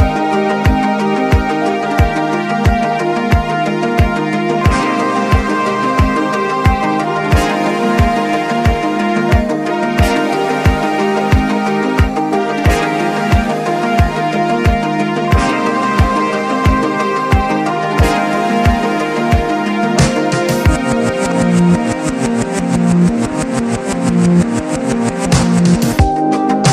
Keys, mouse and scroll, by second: 5.5 click, 7.6 click, 8.7 click, 9.8 typing, 13.0 click, 13.8 alt+scroll up 1, 14.5 click, 14.6 click, 17.1 click, 17.1 typing, 19.0 ctrl+z, 20.8 click, 23.2 click, 24.5 click.